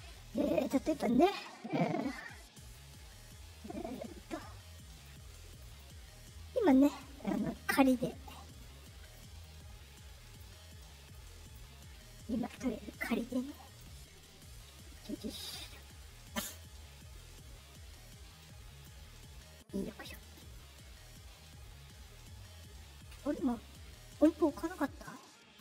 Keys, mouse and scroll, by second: 2.5 click, 2.9-3.9 drag, 4.8 click, 5.4 click, 5.6 click, 6.5 click, 8.7 click, 9.3 click, 10.7 click, 13.0 middle click, 13.0-13.4 scroll down 1, 13.6 middle click, 13.6-14.9 scroll, 14.0 middle click, 14.3 middle click, 14.6 middle click, 14.8 middle click, 14.9 middle click, 15.1 middle click, 15.3 middle click, 15.5 middle click, 16.4 middle click, 16.7 middle click, 17.0 middle click, 17.0-17.6 scroll, 17.2 middle click, 17.5 middle click, 18.3 click, 19.6 click, 20.8 middle click, 20.8-21.1 scroll, 24.3 middle click, 24.6 middle click.